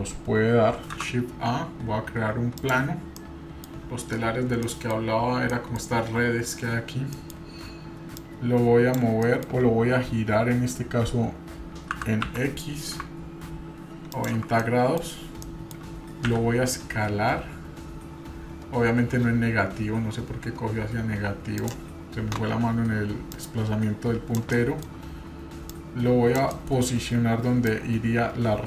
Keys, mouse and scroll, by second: 1.0 shift+a, 3.2 middle click, 4.1-4.7 scroll down 4, 4.7 middle click, 5.1-5.5 scroll up 1, 5.5 middle click, 7.2 middle click, 8.2-9.0 drag, 9.3 middle click, 12.0 b, 14.6 middle click, 15.5-15.8 middle drag, 16.2 s, 23.3-24.4 drag, 24.5-24.9 middle drag, 25.7-26.4 drag, 26.5 middle drag, 27.7-28.6 drag.